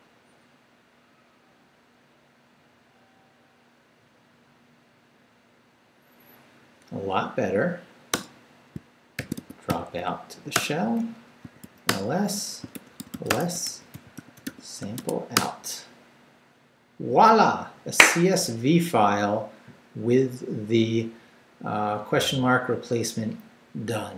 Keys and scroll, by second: 8.1 Return, 8.7 shift+Return, 8.9-15.0 typing, 10.5 Return, 15.3 Return.